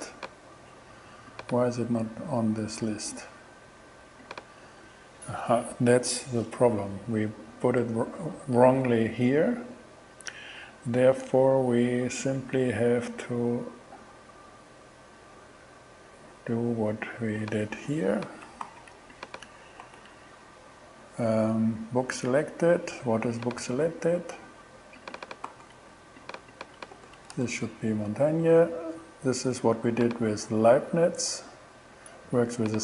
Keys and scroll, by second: 18.7 super+c, 19.9 super+v, 25.5 super+c, 27.0 super+v, 27.4 shift+super+Return, 28.2 shift+Return.